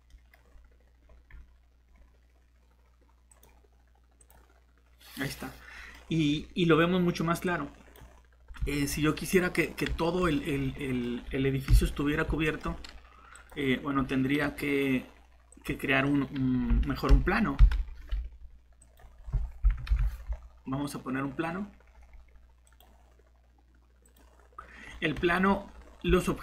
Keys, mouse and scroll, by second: 11.7 shift+7, 14.4 shift+g, 17.6 Delete, 18.1 Tab, 19.1 Tab, 19.9 Delete, 26.1 Tab.